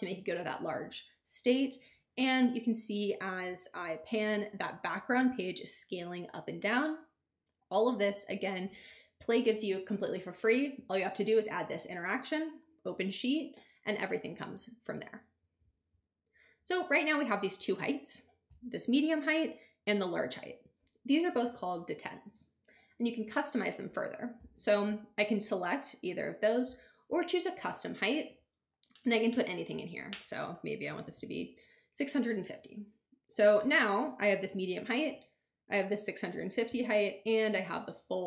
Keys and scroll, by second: 30.6-31.6 typing.